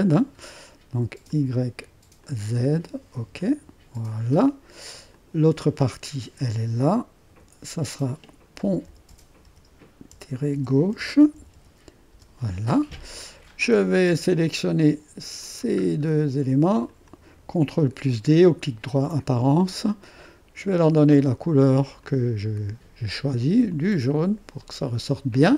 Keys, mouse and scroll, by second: 1.2 click, 2.2-5.0 drag, 5.1-7.0 drag, 7.2 F2, 8.4-12.0 typing, 12.1 Return, 15.4-16.5 drag, 15.9 scroll down 1, 16.9 click, 18.9 ctrl+d, 20.6 click, 22.0-23.0 drag, 23.7 click, 24.8-25.5 drag.